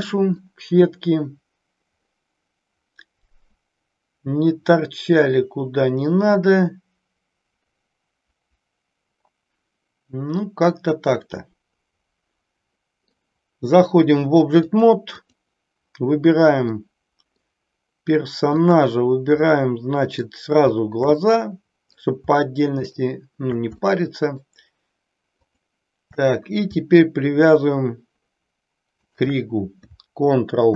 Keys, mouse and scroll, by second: 0.4-13.1 middle drag, 14.7 click, 16.8-17.5 middle drag, 18.6 click, 19.4-20.3 middle drag, 21.2-22.2 middle drag, 22.7 shift+click, 23.8-24.5 shift+middle drag, 25.3 shift+click, 29.0 shift+click, 30.6 ctrl+p.